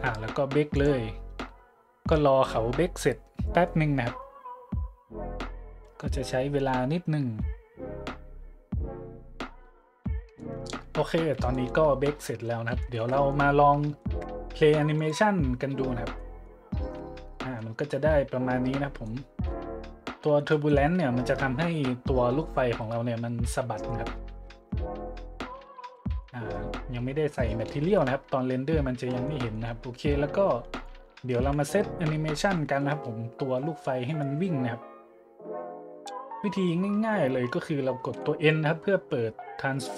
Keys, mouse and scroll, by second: 0.7-1.1 drag, 10.3-10.7 drag, 11.5 shift+click, 12.8-13.4 shift+middle drag, 14.0-14.3 shift+middle drag, 14.9 click, 16.2-16.5 drag, 16.6 middle click, 16.9-17.3 shift+drag, 17.3-17.7 drag, 17.7 middle click, 19.0-19.5 drag, 20.5-20.8 drag, 23.9 click, 24.5 shift+z, 25.9 z, 26.2-26.5 drag, 26.9 scroll down 1, 27.3 drag, 27.7 shift+z, 29.0 z, 29.2-29.6 drag, 30.7-31.1 drag, 31.4 `, 32.2 middle click, 32.5-32.9 shift+middle drag, 34.1 right click, 36.3 middle click, 38.1 n.